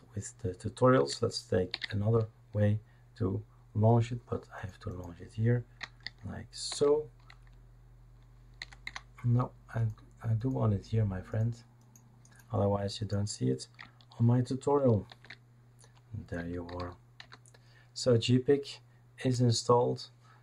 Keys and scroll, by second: 1.7 shift+super+d, 6.7 shift+super+d, 8.6 Escape, 8.8 Escape, 15.1 shift+super+d, 16.4-17.2 typing, 19.2 Return.